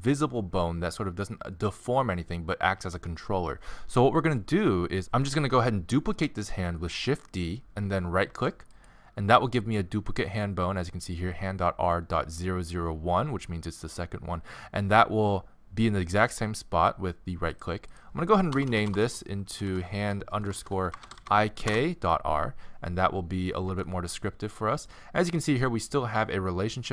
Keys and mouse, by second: 8.4 shift+d, 11.0-13.0 middle drag, 17.5-18.7 drag, 18.7 BackSpace, 18.9 BackSpace, 19.7 Left, 23.7 g.